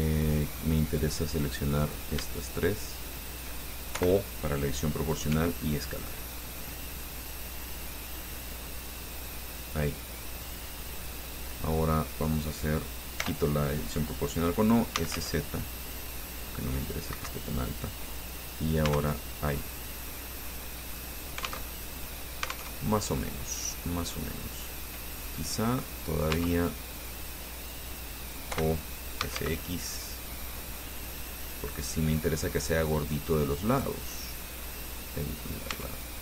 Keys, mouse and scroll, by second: 0.6-1.0 scroll up 2, 2.1 right click, 2.6 shift+right click, 3.2 shift+right click, 4.2 o, 5.5 s, 6.7-7.1 scroll down 2, 7.4 scroll down 2, 9.4 click, 13.4 o, 14.9-15.9 typing, 17.0 click, 17.3 Escape, 19.1 Tab, 19.5-21.9 drag, 21.9 alt+Tab, 22.9 alt+Tab, 23.5 scroll down 2, 23.9-26.6 middle drag, 26.6 Tab, 28.8-30.1 typing, 33.9 click, 34.2-35.8 middle drag, 35.9 Tab.